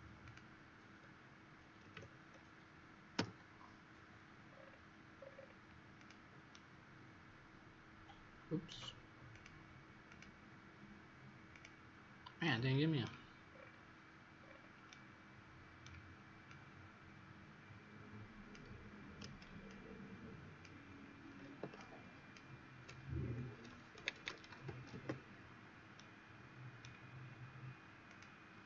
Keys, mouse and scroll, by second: 0.1 click, 1.8 KP_8, 1.8 KP_0, 3.1 Return, 4.4-5.1 scroll down 5, 5.1-5.9 scroll up 2, 5.9-6.4 scroll up 4, 9.3 click, 12.4 right click, 13.4-14.3 scroll down 5, 14.3-14.8 scroll up 5, 14.8 right click, 16.4 click, 23.9-24.8 typing, 24.8 Return, 25.9 right click, 28.0 click.